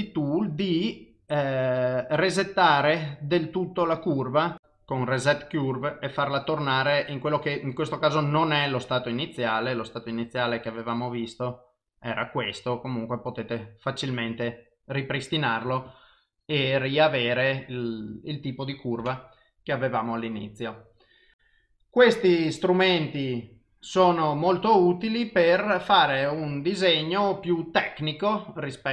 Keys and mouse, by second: 15.9 click.